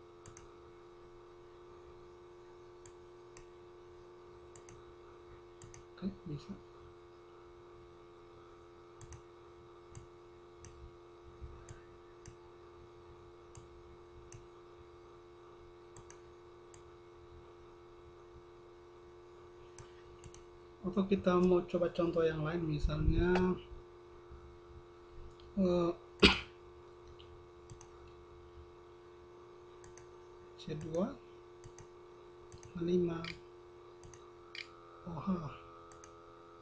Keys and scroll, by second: 30.1 space, 30.9 c, 32.3-36.6 typing.